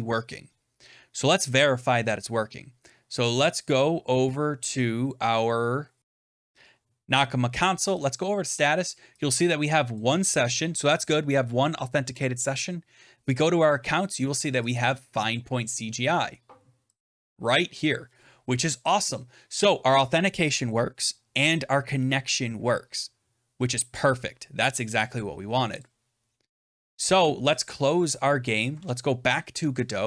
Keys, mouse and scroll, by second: 6.0 click, 7.9 click, 9.9 click, 13.4 click, 14.6 click, 14.7 click, 16.9 click, 25.8 click, 27.4 click, 28.6 alt+Tab.